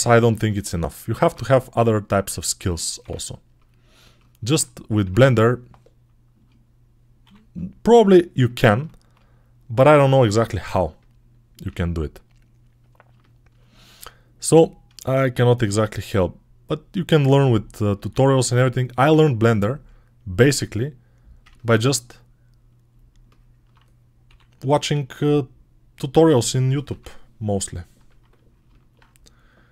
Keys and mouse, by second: 1.0 ctrl+Tab, 2.9 Tab, 4.9 Tab, 6.2-8.3 shift+middle drag, 7.1 3, 8.3 click, 8.4-15.7 middle drag, 10.0 shift+d, 11.5 s, 15.6-19.3 drag, 19.0 1, 19.3 middle click, 20.1 right click, 20.2-24.6 middle drag, 24.1 3, 24.6-25.8 drag, 26.7 Delete, 27.9-29.7 drag.